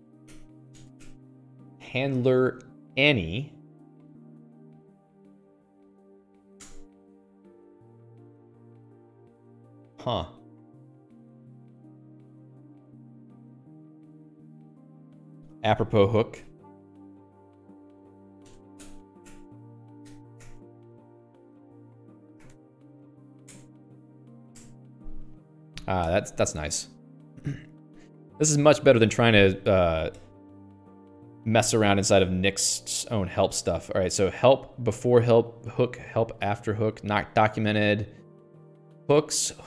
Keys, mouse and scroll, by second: 0.0-1.3 typing, 1.5 Tab, 4.1-5.9 typing, 7.1 Return, 10.9 click, 12.1 click, 16.8-25.3 typing, 19.2 Tab, 19.7 Tab, 20.5 Tab, 20.8 Tab, 21.6 Escape, 24.0 Return, 27.6-28.9 scroll down 28, 28.9-31.6 scroll down 73, 32.1-32.5 scroll down 19, 33.3-33.7 scroll up 10, 33.7-34.1 scroll down 10, 37.6 middle click.